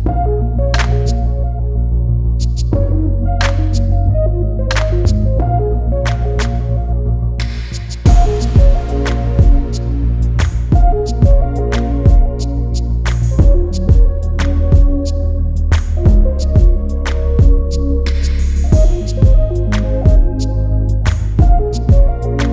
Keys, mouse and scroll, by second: 0.2 Delete, 0.4 scroll down 1, 1.1 scroll up 1, 1.1 click, 3.0 scroll up 1, 4.1 click, 6.1 ctrl+d, 6.5 ctrl+d, 9.6 b, 11.2 click, 11.5 scroll down 1, 12.0 click, 18.2 click, 21.8 right click.